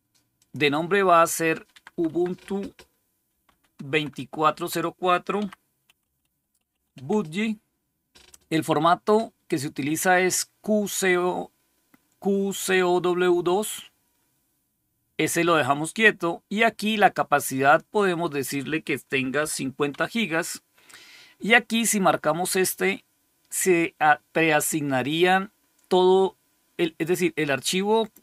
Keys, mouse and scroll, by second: 0.3 click, 1.4 Left, 1.6 Left, 1.7 Left, 1.9 Left, 3.2 4, 3.3 Delete, 3.8 Right, 4.0 Right, 4.4 Right, 5.1-7.3 typing, 17.8 click, 19.3-19.8 typing.